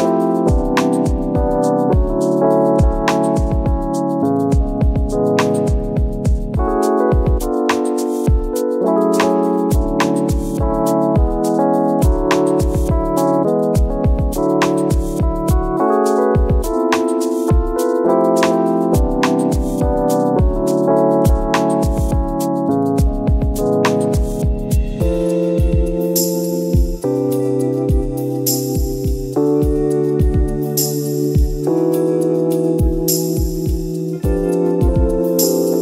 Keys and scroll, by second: 1.2 ctrl+z, 6.9 ctrl+z, 7.5 ctrl+z, 10.3 ctrl+z, 16.8 ctrl+z, 23.5 ctrl+z, 24.4 ctrl+-, 24.7 ctrl+-, 25.1 ctrl+s, 25.6 ctrl+e, 26.3 Delete, 26.9 ctrl+s.